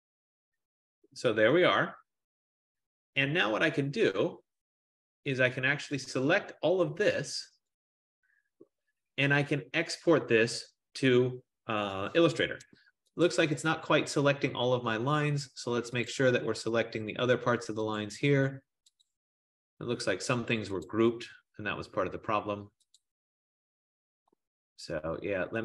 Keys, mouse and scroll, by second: 5.4 click, 7.8 click, 13.5 shift+click, 15.7 click, 16.3 click, 18.1 shift+click, 19.2 shift+click, 22.0 shift+click, 23.0 shift+click, 23.1 shift+click.